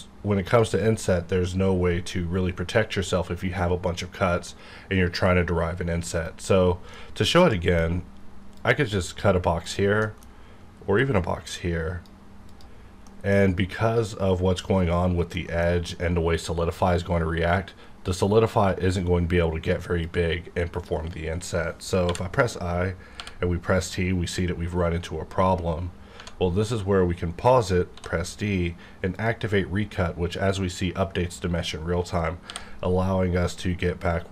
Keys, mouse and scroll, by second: 0.6 click, 6.2 right click, 6.9-8.5 middle drag, 8.5 click, 10.0 middle click, 11.0-12.5 drag, 12.8 scroll down 1, 13.1 middle click, 13.4-15.3 scroll up 1, 15.3 middle click, 17.5 scroll down 1, 20.0-22.0 drag, 23.2 t, 26.2 Tab, 27.9 d, 29.1 click, 32.5 t.